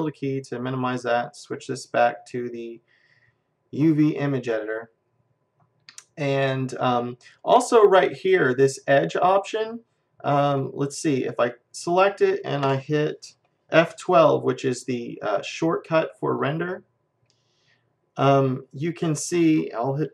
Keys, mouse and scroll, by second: 1.8-3.7 drag, 5.0-7.4 middle drag, 11.4-13.2 drag, 16.5 F12, 18.6-20.1 middle drag.